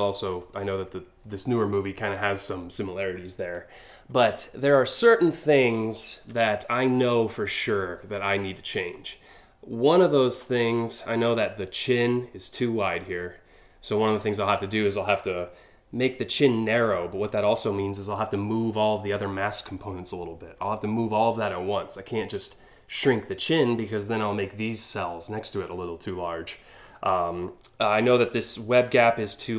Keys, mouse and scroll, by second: 3.3 alt+scroll up 1, 4.8 alt+scroll down 1, 5.2-5.6 alt+scroll up 2, 10.0 click.